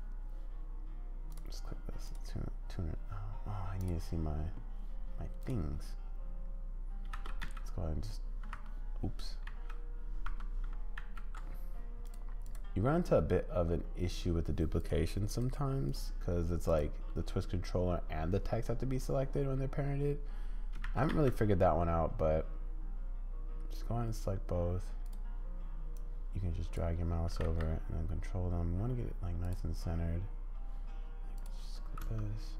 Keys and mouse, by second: 2.1-5.5 drag, 7.1 shift+d, 9.5 z, 10.2 Escape, 11.0 ctrl+z, 12.0 click, 15.3 click, 15.8 click, 20.8 shift+d, 26.0 click, 27.3 g, 31.3 click, 32.0 space.